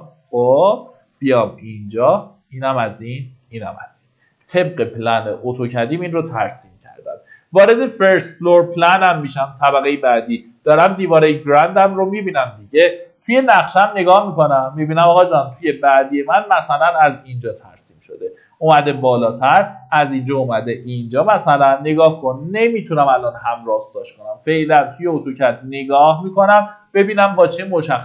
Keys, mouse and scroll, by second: 2.2 click, 4.7 Escape, 5.1 scroll down 1, 8.7 click, 12.2-13.5 middle drag, 13.3-14.3 typing, 15.7-16.9 scroll up 1, 16.9 click, 17.9 scroll down 1, 19.2 click.